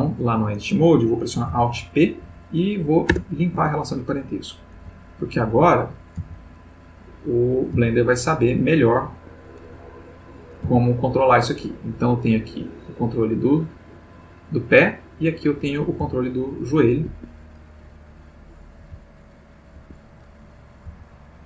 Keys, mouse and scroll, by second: 1.5 alt+p, 2.2 alt+Down, 3.0 Return, 3.5 Tab, 4.7 g, 5.5 click, 6.2 g, 7.0 click, 7.8 g, 8.6 click, 9.1 Escape, 9.8 click, 10.6 g, 14.5 click, 15.2 click, 16.0 g, 17.1 Escape, 18.8 g, 19.8 Escape, 20.8 g.